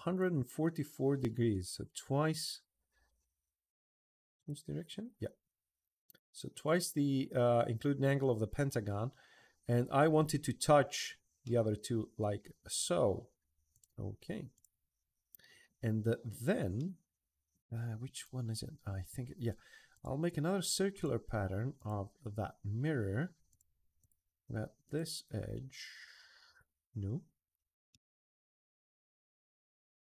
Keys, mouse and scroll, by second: 2.1 click, 4.2 click, 5.1 middle drag, 5.6 middle click, 6.0 middle click, 6.2 middle drag, 6.8 middle drag, 8.0-9.7 middle drag, 9.8-10.2 middle drag, 11.2-12.4 middle drag, 12.9 middle click, 13.5 click, 13.7 e, 14.3 click, 16.5-18.7 middle drag, 19.7 click, 20.7 click, 21.5 click, 23.3 click, 23.8 click, 24.6 click, 27.7-30.0 middle drag.